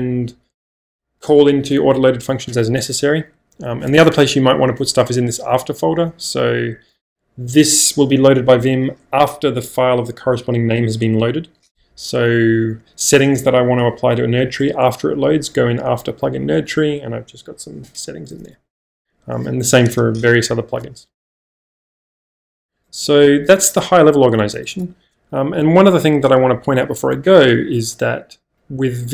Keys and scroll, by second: 3.3 k, 3.9 Return, 5.5 j, 5.9 o, 12.8-13.6 typing, 16.5 Return, 18.7 -, 22.2-22.9 typing.